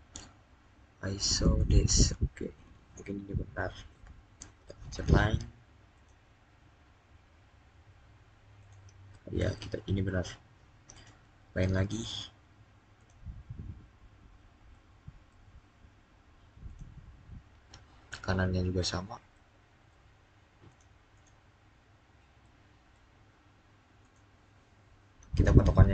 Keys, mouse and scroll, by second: 1.4 click, 2.5 click, 2.6-4.3 scroll up 1, 4.8 click, 6.4 scroll down 1, 8.4 click, 10.7 click, 11.7-12.8 scroll up 1, 12.8 click, 13.7-14.5 scroll up 1, 14.5-16.5 middle drag, 16.5 click, 18.6-19.1 scroll down 1, 19.1 middle click, 20.5 click, 21.7-22.2 scroll up 1, 22.2-23.8 middle drag, 23.8 click, 25.2-25.9 scroll down 1.